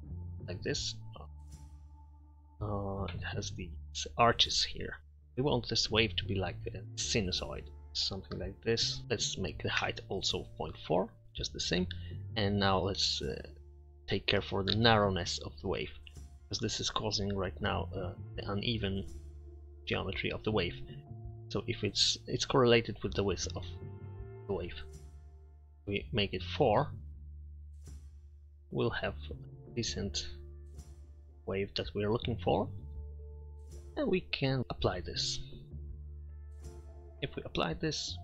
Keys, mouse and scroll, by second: 0.0 middle click, 1.3 KP_7, 3.3-5.0 middle drag, 9.0-10.6 middle drag, 11.5-13.3 middle drag, 16.7 middle click, 24.0-25.6 drag, 26.1 middle click, 27.7-28.6 middle drag, 28.7 KP_7, 31.3-32.5 middle drag, 32.9 middle drag, 33.6 Tab.